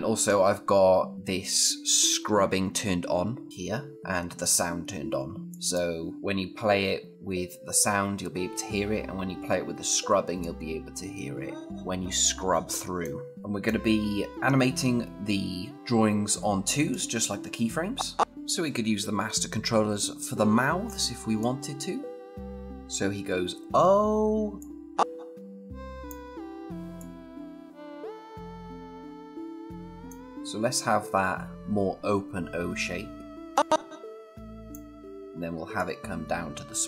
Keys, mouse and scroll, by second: 5.4 click, 10.2-13.0 click, 15.7 scroll up 1, 16.7-18.4 click, 18.4-18.8 scroll down 1, 20.7-21.2 scroll up 1, 21.2-22.7 click, 22.7 z, 24.4-25.9 click, 33.3-34.6 click.